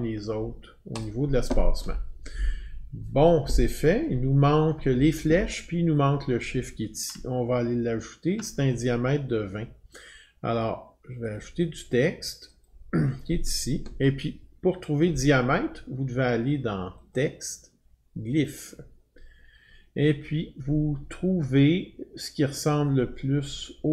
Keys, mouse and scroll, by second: 1.0 click, 7.1 click, 7.3-7.8 alt+scroll, 11.4 click, 12.6 click, 17.1 click, 18.5 click.